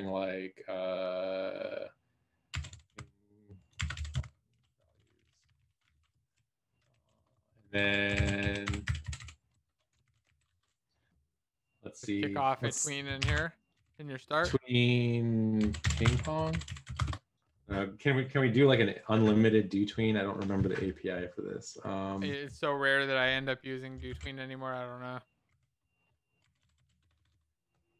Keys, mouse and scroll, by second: 7.5 ctrl+s, 7.7 Return, 7.7 Up.